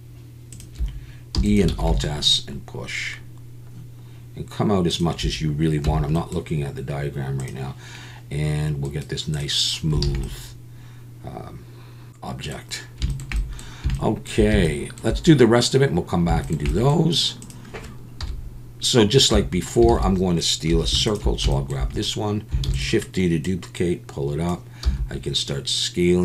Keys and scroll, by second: 1.4 e, 1.7 alt+s, 5.8 Tab, 10.0 alt+a, 18.2 KP_1, 19.3 Tab, 19.9 alt+a, 20.7 2, 22.7 shift+d, 24.8 s.